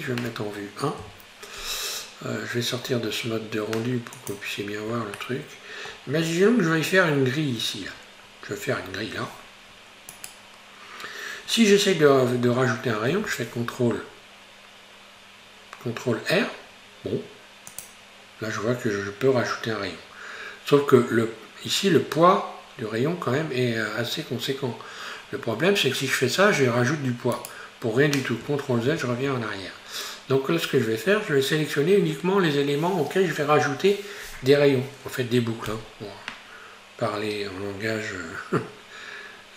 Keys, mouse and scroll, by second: 1.0 KP_1, 2.8-4.1 scroll down 5, 4.2 click, 5.2-6.2 shift+middle drag, 6.2-9.2 scroll up 1, 10.2 right click, 13.1 ctrl+r, 28.9 ctrl+z, 31.2 scroll up 1.